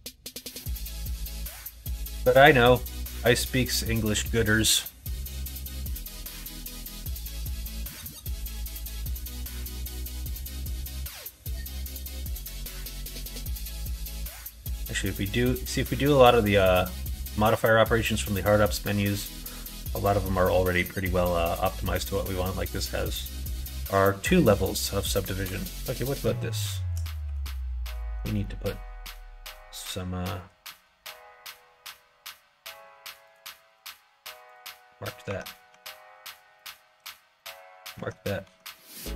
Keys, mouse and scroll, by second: 0.3 shift+middle click, 1.1 middle click, 1.6 shift+middle click, 2.6 middle click, 3.9 middle click, 4.6 middle click, 5.0 middle click, 5.5 shift+middle click, 6.1 middle click, 7.1 middle click, 7.8 middle click, 8.4 middle click, 9.0 middle click, 10.1 middle click, 10.4 shift+middle click, 10.8 middle click, 13.1 click, 13.9 q, 21.8 middle click, 22.4 middle click, 24.0 middle click, 25.0 click, 25.3 Tab, 25.9 middle click, 27.1 2, 27.8 alt+click, 28.3-30.6 middle drag, 29.9 typing, 33.1 ctrl+click, 33.5 q, 35.2 Tab, 35.6 Tab, 36.5 click, 36.9 q, 37.8 Tab, 38.3 Tab, 38.7 Tab.